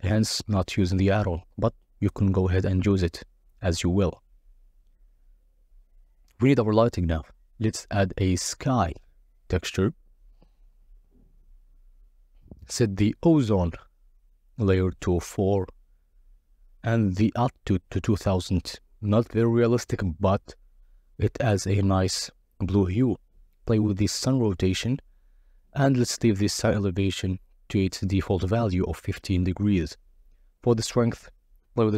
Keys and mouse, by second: 0.2 z, 0.6 click, 1.2 KP_0, 2.8 ctrl+b, 4.6-6.6 drag, 7.2-8.7 drag, 12.4 click, 14.1-16.9 drag, 17.7 click, 19.3-22.2 drag, 23.6-25.0 drag, 25.9 KP_0, 27.2 click, 28.0 click, 28.8 click, 29.6 click.